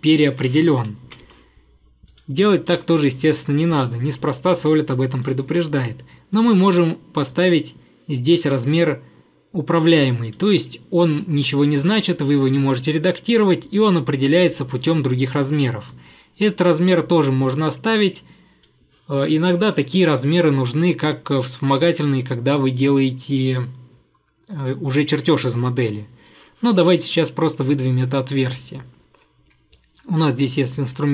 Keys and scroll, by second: 1.0 Escape, 1.2 Escape, 2.6 Delete, 11.1 Escape, 11.3 Escape.